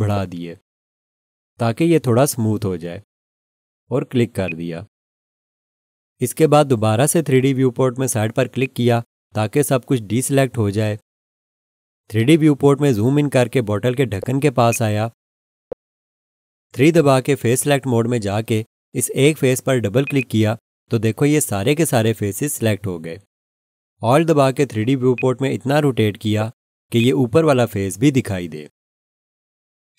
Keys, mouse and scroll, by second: 4.4 click, 8.6 click, 14.0 scroll up 1, 14.5 scroll, 14.7 alt+shift+click, 15.5 scroll up 1, 17.6 3, 20.0 click, 20.2 double click, 25.1 alt+click, 26.2 scroll down 1, 27.0 alt+click.